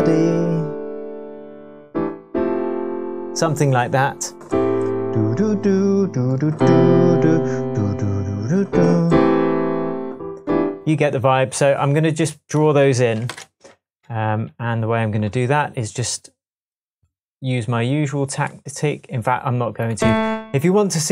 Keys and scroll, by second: 13.3 shift+super+m.